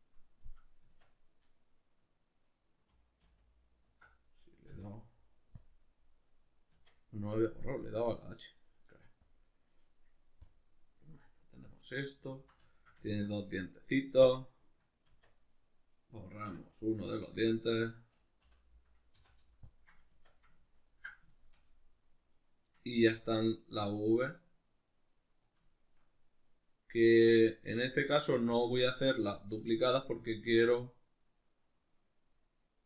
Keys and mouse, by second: 0.4-7.6 middle drag, 0.8 Tab, 3.2 alt+h, 4.7 x, 6.8 Tab, 7.6-11.1 drag, 11.1-14.2 middle drag, 14.2 click, 15.1 Tab, 15.6 right click, 16.5 l, 17.1 ctrl+middle click, 17.7 right click, 18.4 l, 20.1 Tab, 20.5-28.6 ctrl+middle drag, 22.9 Tab, 28.6-29.8 drag, 29.8-32.8 middle drag.